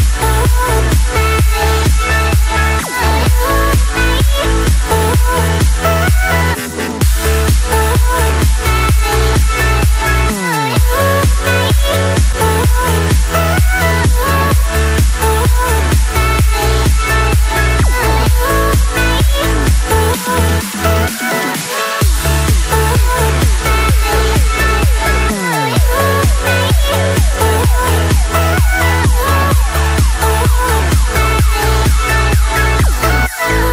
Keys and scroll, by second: 21.2 ctrl+0.